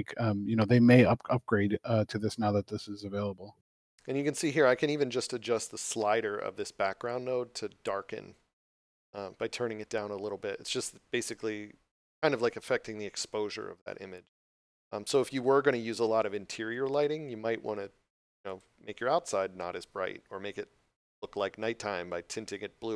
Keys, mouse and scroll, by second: 0.5 click, 18.4 click.